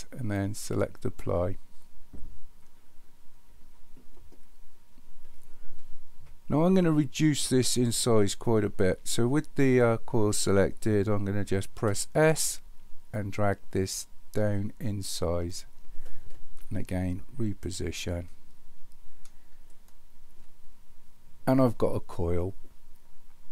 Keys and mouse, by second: 11.8 s, 16.7-17.9 shift+middle drag, 19.7-20.3 shift+middle drag.